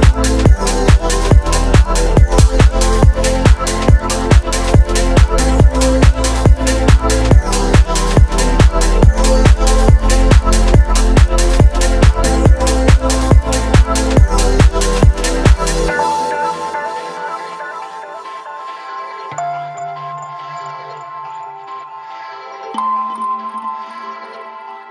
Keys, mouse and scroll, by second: 0.5 ctrl+r, 5.1 s, 7.0 x, 9.2 click, 10.2 Tab, 12.0-14.2 drag, 15.6 click, 16.7 right drag, 16.9 click, 16.9 right click, 17.2 click, 18.6-19.5 drag, 21.4 shift+a, 24.6 ctrl+alt+KP_0.